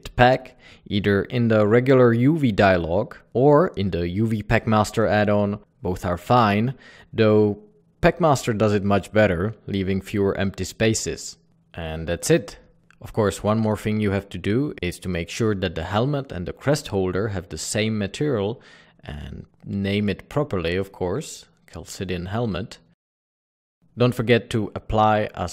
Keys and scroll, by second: 13.3 alt+a, 19.5-22.0 typing, 22.2 Return.